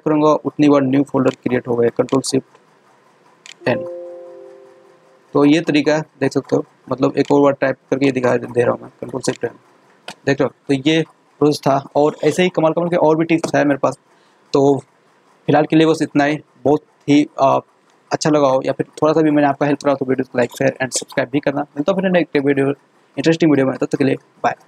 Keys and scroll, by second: 3.4 ctrl+shift+n, 9.2 ctrl+shift+n.